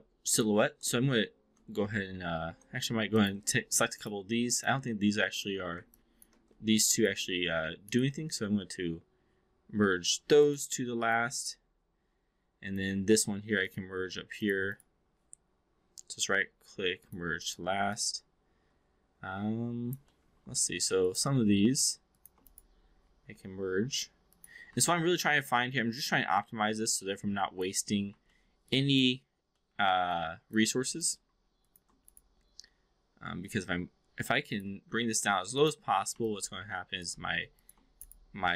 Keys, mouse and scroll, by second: 0.2 shift+click, 3.0 click, 3.8 shift+click, 4.4 shift+click, 5.9 ctrl+click, 6.8 shift+click, 8.0-10.5 right drag, 11.3-12.8 alt+drag, 14.6-17.0 right drag, 17.4 click, 17.8-20.0 alt+drag, 20.1 alt+middle click, 22.0 shift+click, 22.4-24.4 right drag, 24.8-27.8 alt+drag, 28.3 alt+middle click, 28.7-29.0 alt+drag, 29.4-29.8 alt+middle drag, 30.1-30.6 alt+drag, 31.6 shift+click, 32.2-34.6 right drag, 35.5 click, 36.2-37.0 alt+drag, 38.0-38.5 right drag.